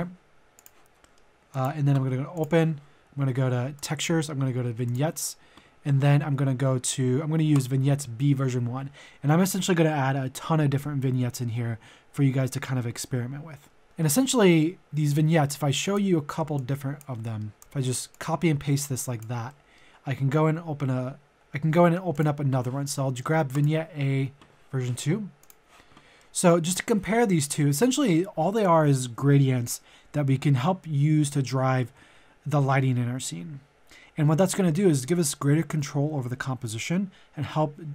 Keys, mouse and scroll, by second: 0.6 click, 1.0 middle click, 1.5 click, 5.5 click, 13.8 middle click, 14.8 click, 16.5 click, 17.2 middle click, 17.6 ctrl+v, 18.1-19.5 drag, 19.5 middle click, 21.3 click, 26.1 middle click.